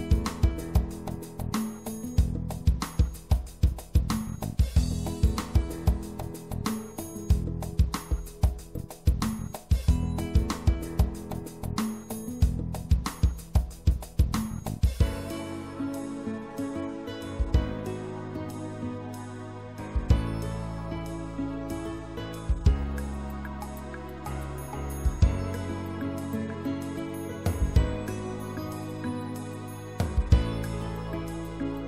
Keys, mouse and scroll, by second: 0.5 click, 0.8 right click, 5.9-7.8 middle drag, 16.7-21.6 drag, 21.6-23.0 right drag, 24.3 w, 25.2 w, 26.0 w, 27.3-29.5 middle drag, 29.8 c, 31.7 c.